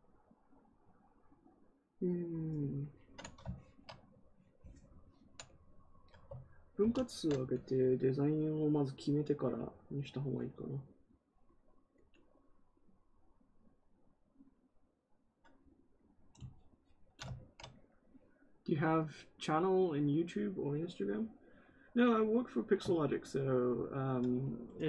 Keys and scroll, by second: 6.7 ctrl+d.